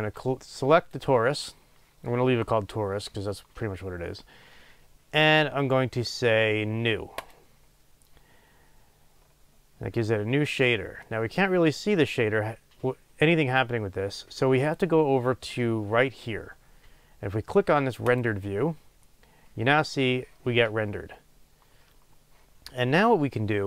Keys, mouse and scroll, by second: 7.3-18.4 drag.